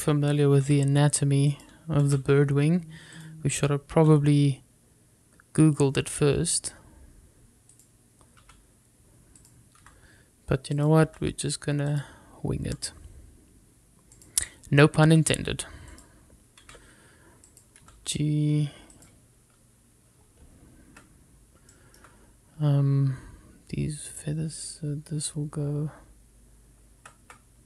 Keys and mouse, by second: 0.9 click, 1.8 r, 2.6 click, 3.2 g, 4.3 click, 5.2 e, 8.8 click, 9.5 e, 10.5 click, 10.9 r, 11.8 click, 12.2 g, 13.0 click, 13.7 r, 15.3 click, 16.3 e, 17.0 click, 17.7 r, 18.6 click, 18.9 g, 20.0 click, 20.6 x, 22.8 shift+middle click.